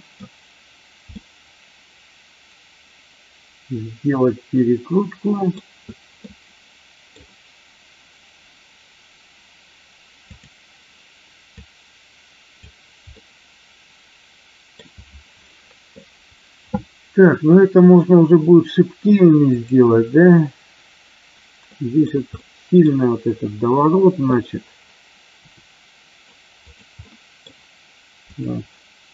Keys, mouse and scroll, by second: 1.1-5.4 middle drag, 6.3 middle click, 10.2 click, 11.5-12.7 drag, 13.0-14.8 middle drag, 13.0 scroll up 1, 19.5 click, 21.7 middle click, 22.3 middle click, 25.4 r, 26.5 click, 27.0 middle click, 28.3 click.